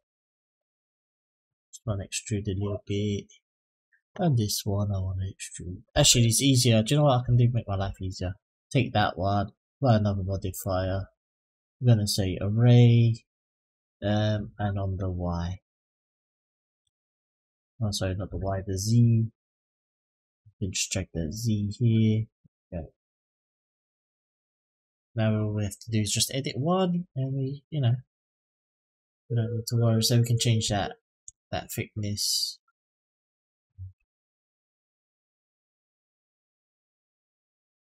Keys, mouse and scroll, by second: 0.8 click, 2.0-3.3 drag, 4.3 click, 6.6 click, 7.0 Delete, 7.3 click, 7.6 Delete, 7.9 click, 9.6 click, 10.3 click, 11.4-12.7 drag, 13.8 click, 14.6 click, 15.7-16.8 drag, 17.5 click, 18.6 click, 20.3-22.2 drag, 23.2 click, 24.7 click, 25.3 middle click, 26.2 click, 27.5 click, 30.5-32.7 ctrl+drag, 33.1-35.9 drag, 36.6 click, 37.1-38.0 scroll down 4.